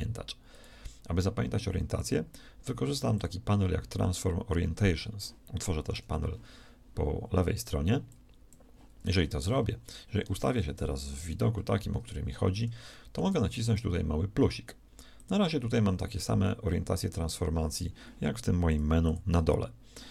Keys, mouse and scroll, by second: 0.4-5.0 drag, 5.9 t, 10.4 KP_1, 11.2 ctrl+KP_3.